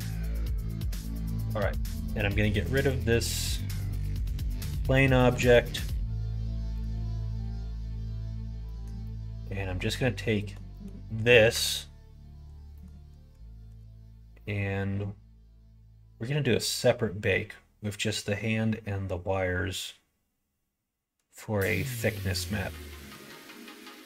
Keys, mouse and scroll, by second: 0.2 middle click, 1.6 Tab, 2.8 click, 4.4 l, 5.3 x, 8.6 middle click, 9.0 middle click, 10.3 middle click, 10.7 middle click, 11.2 middle click, 11.7 Tab, 12.8 middle click, 13.5 ctrl+s.